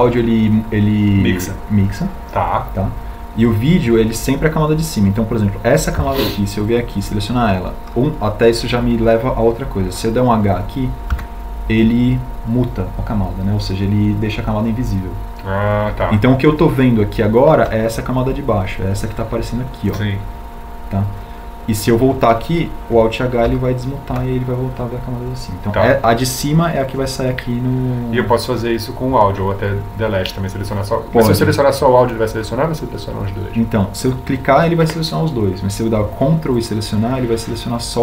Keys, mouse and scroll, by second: 13.4 h, 25.4 alt+h.